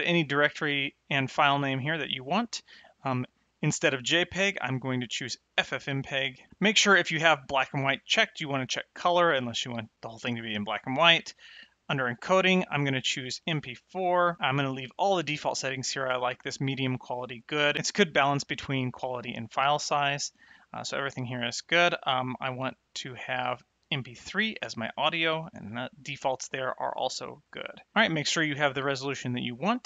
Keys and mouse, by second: 3.8 click, 8.3 click, 11.5 click, 22.3 click, 23.9 click.